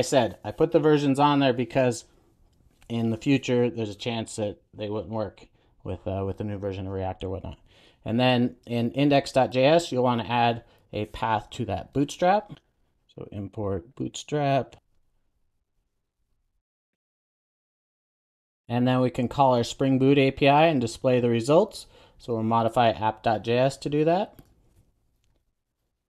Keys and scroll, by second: 18.4 super+s, 24.6 super+a.